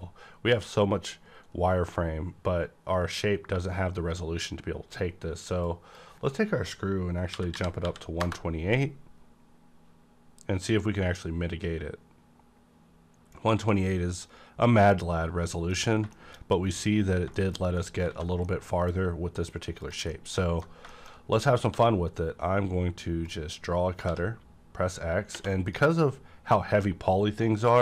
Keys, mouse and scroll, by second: 0.1 scroll down 1, 5.7-7.4 drag, 5.7 scroll down 1, 7.3 KP_1, 7.4 KP_2, 7.8 KP_8, 8.2 KP_Enter, 14.6 scroll down 1, 14.6 KP_Enter, 14.9 middle click, 15.8 scroll up 2, 16.1 middle click, 17.0-17.4 scroll down 2, 17.3 shift+middle click, 17.3 shift+middle click, 18.1 alt+a, 18.3-19.8 middle drag, 19.5 scroll up 1, 19.8 click, 20.1 middle click, 20.1 middle click, 20.4-21.6 alt+middle drag, 21.6 d, 23.2-25.3 drag, 23.2 d, 24.1 x.